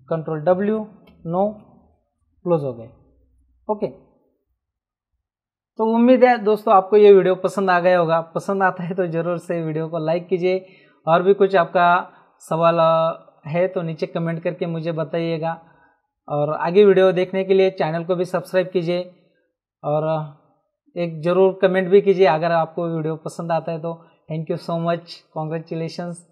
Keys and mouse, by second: 0.2 ctrl+w, 1.1 Right, 1.5 Return, 1.5 KP_Enter.